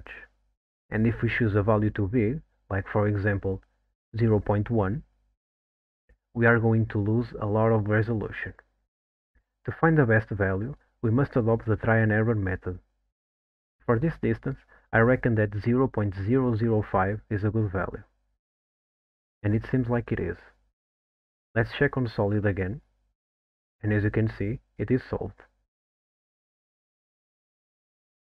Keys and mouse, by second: 1.0 KP_0, 7.5 middle click, 11.6-20.1 drag, 13.5 KP_0, 18.3 KP_0, 23.1 click.